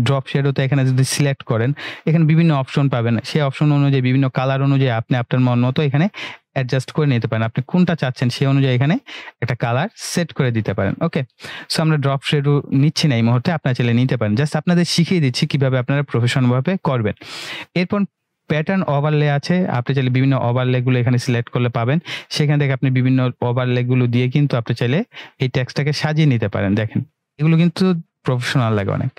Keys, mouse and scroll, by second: 4.2-7.5 drag, 18.7 click.